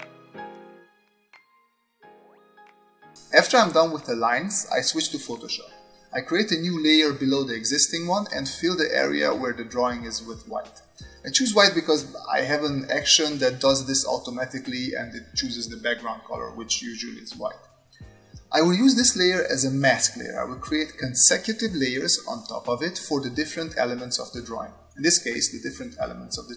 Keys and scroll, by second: 0.3-3.4 typing.